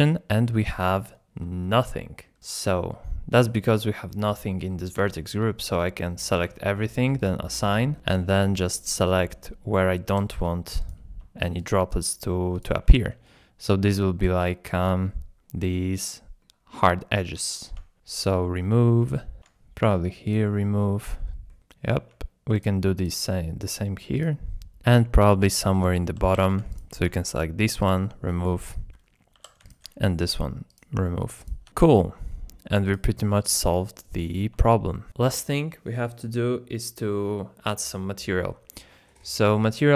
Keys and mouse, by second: 1.6-2.6 shift+middle drag, 5.0 Tab, 6.3 a, 7.3 click, 8.0 middle click, 10.2 3, 10.8 click, 11.6 click, 13.2 click, 13.8 shift+middle click, 14.7 middle click, 16.8 middle click, 18.1 click, 19.0 middle click, 20.0 middle click, 20.3 click, 21.5-22.6 middle drag, 24.1 click, 25.6 click, 25.9 shift+click, 26.7 middle click, 26.9 alt+1, 27.9-29.4 drag, 29.4 3, 30.8 click, 31.7 Tab, 31.7-32.7 middle drag, 33.5-34.3 middle drag, 34.6 shift+middle drag, 35.1 Tab.